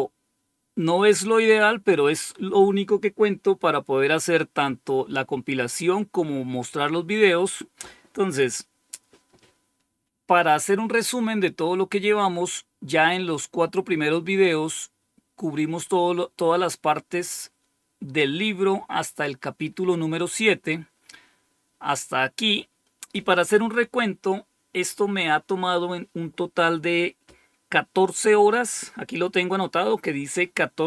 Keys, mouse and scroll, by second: 15.9 scroll down 1, 17.0 scroll down 1, 18.5-20.9 scroll down 8.